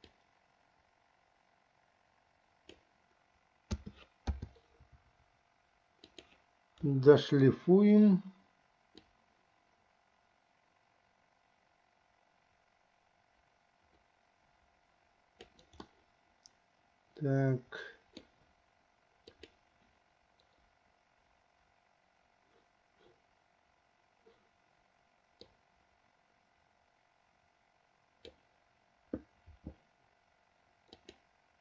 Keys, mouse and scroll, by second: 0.4-3.3 drag, 4.2 a, 4.7 i, 6.2 click, 7.0 Delete, 9.2-15.9 drag, 16.2-18.6 middle drag, 19.6 click, 25.7-28.6 drag, 31.1 click.